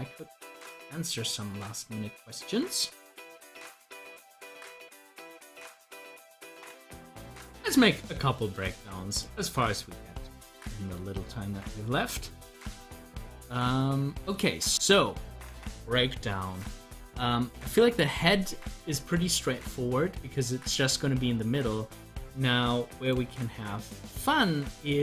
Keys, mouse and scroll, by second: 6.8 click, 8.6 click, 13.6 click, 14.3-17.6 middle drag, 18.0 scroll up 1, 18.5 scroll down 1, 23.0 click.